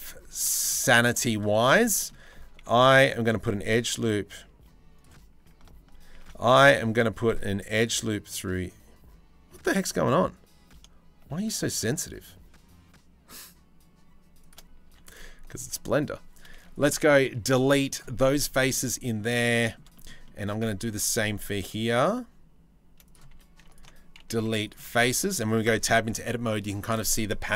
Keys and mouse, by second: 0.7 shift+click, 2.2 ctrl+r, 5.7 ctrl+r, 14.5 3, 16.4 middle click, 17.1 Delete, 18.4 middle click, 19.0 middle click, 20.5 ctrl+r, 22.9 3, 23.9 Delete, 24.8 Tab, 24.9 drag, 25.2 click, 25.5 drag, 25.9-26.3 drag.